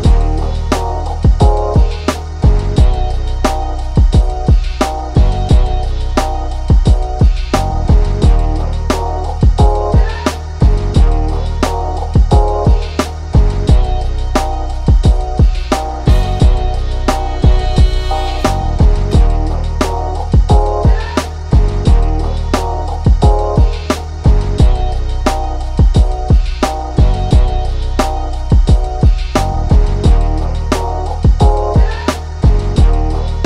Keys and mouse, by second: 3.0 right click, 3.6-6.8 drag, 9.3 click, 10.6 click, 11.5 click, 12.6 click, 13.5 click, 14.5 ctrl+z, 15.5 click, 17.1 click, 18.1 click, 18.3 ctrl+z, 18.9 click, 21.9 click, 23.0-25.6 shift+drag, 26.8-29.9 drag, 29.9 ctrl+z, 30.2 ctrl+=, 30.9 click, 31.3 ctrl+z, 31.9-33.4 drag.